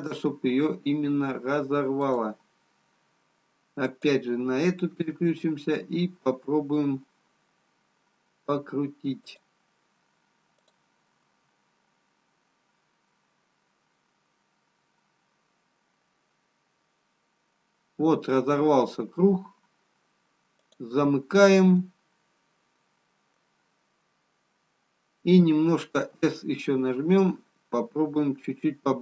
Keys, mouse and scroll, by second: 3.8 click, 4.9 s, 10.7 click, 11.3 s, 21.3-21.8 scroll up 3, 22.7 middle click, 24.7-25.8 scroll up 1, 26.0 s.